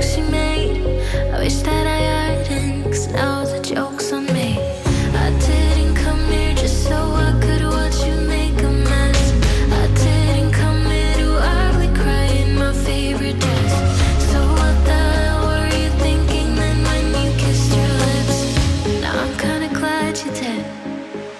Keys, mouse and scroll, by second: 0.0-1.1 typing, 2.5 click, 2.9-5.0 typing, 4.1 Tab, 6.7 click, 9.9-13.8 drag, 11.7-12.2 typing, 13.8 Return, 15.2 click, 16.5 right click, 18.4 click, 19.6 1, 20.0 Return, 21.1 click.